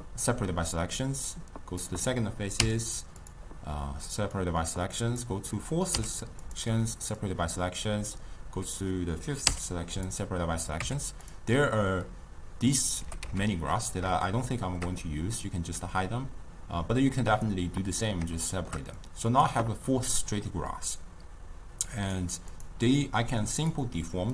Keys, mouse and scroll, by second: 1.4 click, 4.4 click, 6.0 p, 7.3 click, 11.3 click, 14.3-15.8 shift+middle drag, 15.8 click, 18.5-19.0 shift+middle drag, 19.0 click, 22.1 click, 22.6 click, 23.6 click.